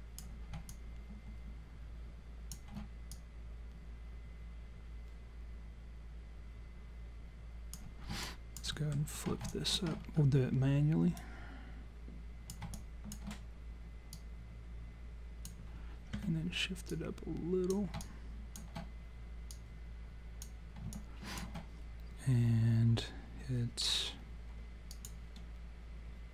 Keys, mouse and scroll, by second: 0.7 alt+click, 3.1 click, 8.3 alt+click, 8.7 alt+middle click, 9.5 alt+click, 10.0 scroll up 2, 11.2 click, 12.8 alt+click, 14.1 click, 16.2 w, 16.9 click, 18.0 alt+click, 19.5 click, 21.0 alt+click, 24.9 click.